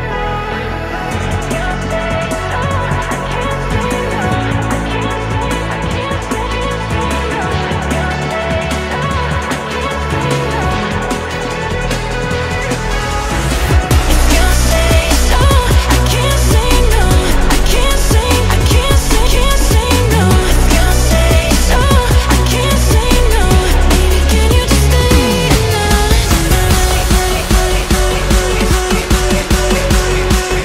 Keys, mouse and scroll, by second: 0.1-0.6 shift+middle drag, 0.6 shift+a, 2.8-3.7 scroll down 1, 3.7 s, 4.8 scroll up 1, 5.1 shift+middle click, 5.5 s, 7.5-7.8 scroll up 1, 7.8 shift+middle click, 8.3 s, 9.4 shift+middle click, 9.8-10.9 scroll down 2, 10.9-14.3 drag, 14.3 s, 15.1 middle click, 15.4 g, 16.4 KP_1, 16.7-17.3 scroll up 1, 17.3-17.9 right drag, 17.9-18.4 shift+middle drag, 18.4 s, 20.3 g, 21.5 scroll up 1, 21.5-22.9 middle drag, 22.9 shift+d, 24.5-25.5 middle drag, 25.5 g, 26.5 g, 27.8 KP_2, 28.7 click, 29.2 click, 29.5-30.2 shift+middle drag, 30.2 click.